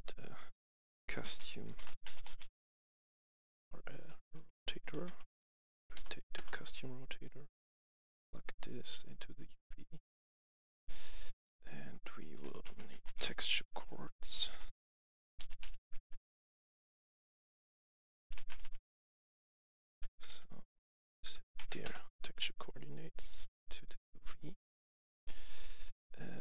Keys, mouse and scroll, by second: 0.7-2.7 typing, 4.0-6.0 typing, 6.0 Down, 6.2 Return, 7.5-9.6 drag, 9.6 right click, 12.1-13.6 typing, 15.0-15.8 typing, 17.8-18.5 typing, 19.6 Up, 20.1 Up, 20.1 Down, 20.6 Up, 21.0 Up, 21.2 Up, 21.5 Down, 21.7 Return, 22.9 click, 24.0 click.